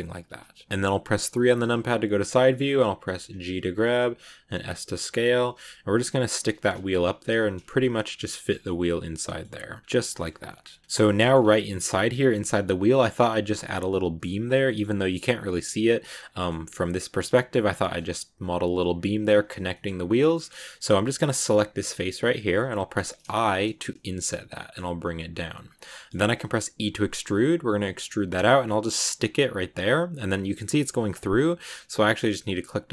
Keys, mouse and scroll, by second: 0.6 middle click, 1.2 KP_3, 2.0 click, 2.3 shift+middle click, 2.5 scroll up 1, 2.5 scroll down 1, 2.6 scroll up 1, 2.9 shift+middle click, 3.2 scroll up 1, 3.4 g, 8.4 scroll down 2, 8.5-9.8 middle drag, 9.8 scroll up 2, 9.9 g, 10.8 middle click, 11.2-12.1 scroll up 3, 12.4-14.4 middle drag, 14.4 scroll down 2, 14.6-16.0 middle drag, 16.0 scroll down 2, 16.3-17.5 middle drag, 17.5 scroll up 2, 17.7 middle click, 18.5 right click, 19.6 middle click, 20.1 scroll up 3, 21.7 scroll down 2, 22.7 i, 25.8-27.0 middle drag, 27.0 e.